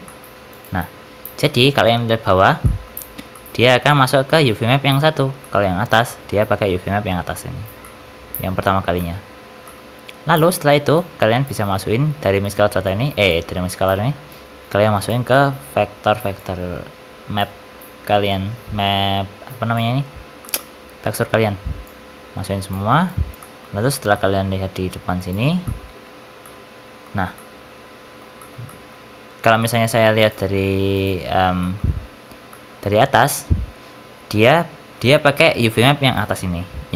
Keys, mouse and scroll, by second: 0.5 ctrl+shift+click, 1.3 middle click, 2.5 middle click, 3.1 scroll down 3, 3.2 middle click, 5.3 middle click, 7.7 middle click, 8.8 middle click, 9.5 middle click, 9.9 scroll down 5, 10.2 middle click, 10.8 click, 12.8 click, 15.2 middle click, 16.3 click, 18.2 click, 20.0-20.3 scroll down 7, 20.3 middle click, 21.7 click, 23.0 click, 24.0 middle click, 25.1 ctrl+shift+click, 25.5 middle click, 26.3 middle click, 27.2 middle click, 28.3 shift+middle click, 28.6 shift+middle click, 29.1-29.5 scroll up 1, 29.5 shift+middle click, 30.0 click, 31.5 middle click, 31.9 Tab, 32.4 middle click, 35.9 click.